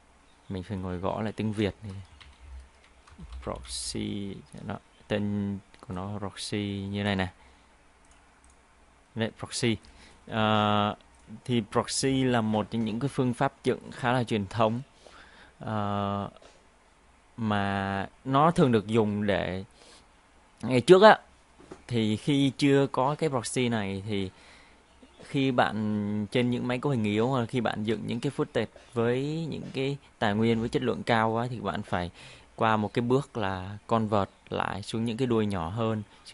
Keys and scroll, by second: 2.3 ctrl+a, 3.3 shift+p.